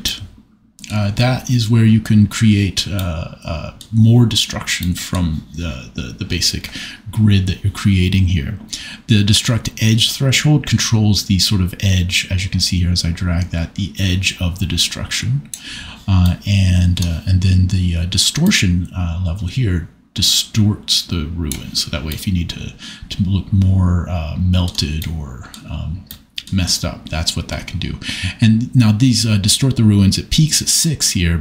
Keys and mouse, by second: 1.0-3.0 middle drag, 4.8 middle click, 10.3 click, 11.6 click, 14.7 click, 16.2 middle click, 18.4-21.0 drag, 29.8-31.4 drag.